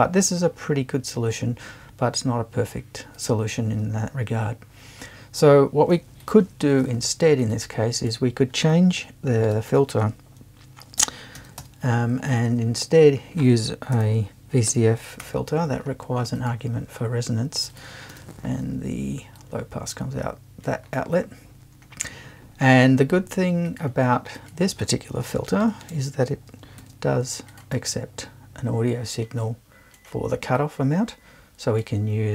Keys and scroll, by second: 6.6 BackSpace, 9.3 BackSpace, 10.8-12.1 typing, 14.0 Right, 14.7 space, 15.2 l, 18.1 BackSpace, 25.3 BackSpace, 26.6 shift+BackSpace, 26.8 shift+`.